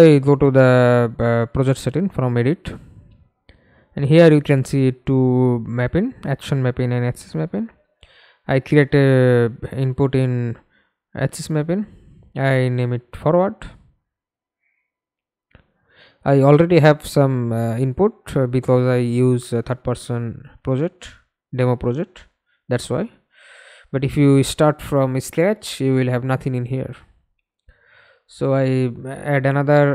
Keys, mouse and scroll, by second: 0.2 double click, 4.8-7.9 scroll down 1, 9.7-12.0 typing, 12.7-13.4 scroll down 1, 13.4-14.3 scroll up 1, 20.5-22.2 scroll down 1, 22.2-22.6 scroll down 3, 22.6-24.1 typing, 26.7-27.8 typing, 28.3 Return, 29.8 double click.